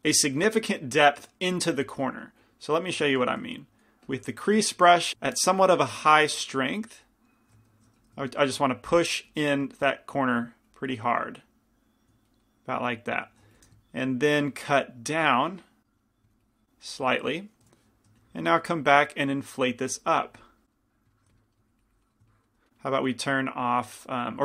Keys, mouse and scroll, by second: 3.6 shift+c, 3.6 shift+f, 7.2-13.6 drag, 7.9 shift+f, 13.6 f, 14.2-21.1 drag, 18.3 i, 18.3 f, 20.6 middle click, 21.3 f, 21.9-24.4 drag.